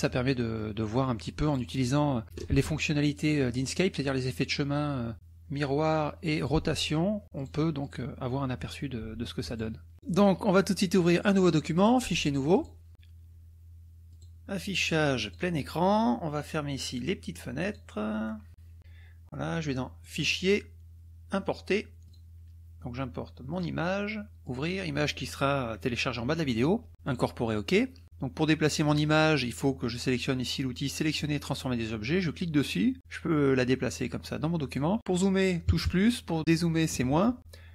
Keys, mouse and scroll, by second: 0.4 click, 1.5 click, 5.1 click, 6.4 click, 7.5 click, 9.5 click, 10.1 drag, 10.5 click, 11.8 click, 12.6 click, 12.9 drag, 14.1 click, 15.3 click, 16.9 click, 17.7 click, 18.8 click, 20.0 click, 22.0 click, 23.6 drag, 24.4 click, 27.1 click, 32.3-34.9 drag, 35.6 KP_Add, 37.0 KP_Subtract.